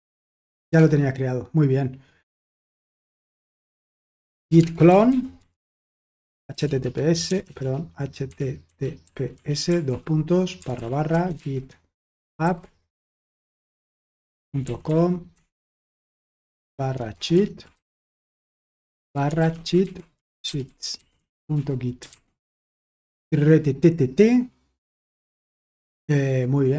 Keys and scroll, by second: 0.0-0.9 typing, 3.9-22.5 typing.